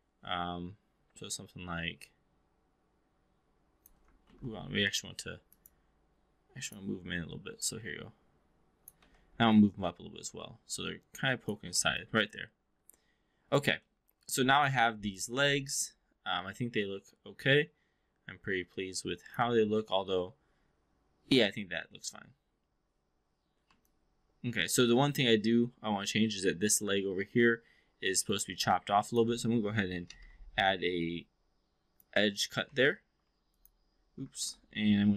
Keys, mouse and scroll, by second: 1.1-3.8 drag, 4.2 ctrl+z, 5.6-6.7 drag, 7.6-8.9 drag, 9.0 w, 9.6 click, 11.8-13.6 alt+drag, 13.9 alt+middle click, 14.2 alt+drag, 15.0-19.4 alt+drag, 19.5 v, 23.8-24.7 alt+drag, 25.0 alt+middle drag, 28.0 click, 28.3 click, 29.0 click, 30.0 alt+c, 30.9-32.0 drag, 32.6 4, 33.1 3, 33.5 click, 34.4 ctrl+z.